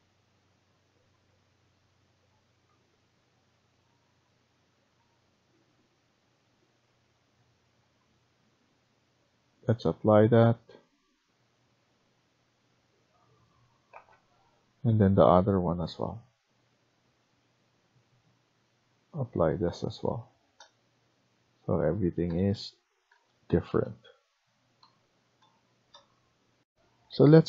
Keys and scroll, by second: 13.8 ctrl+c, 17.5 ctrl+v, 20.2 Escape, 26.5 F1.